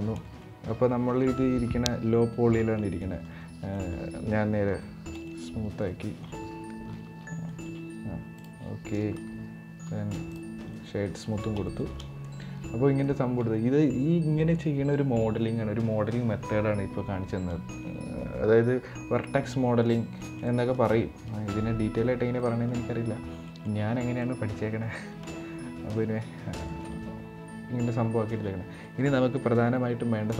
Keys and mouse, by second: 0.1 middle click, 2.7 middle drag, 3.4 middle click, 4.4 ctrl+3, 5.0 middle click, 6.5 ctrl+2, 7.1 middle click, 8.0 click, 9.5 w, 10.5-10.8 middle drag, 11.4 shift+middle drag, 12.0-12.8 middle drag, 19.2-19.6 middle drag, 19.9 shift+middle drag, 20.3 middle click, 22.1 middle click, 23.2 middle click, 23.9 middle drag, 25.0-25.9 middle drag, 26.4 shift+middle drag, 26.7-28.0 middle drag, 28.5 middle click.